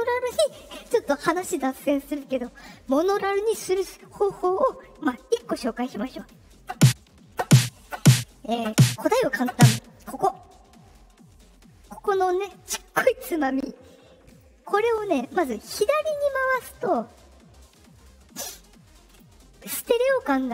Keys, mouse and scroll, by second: 14.3-19.1 drag.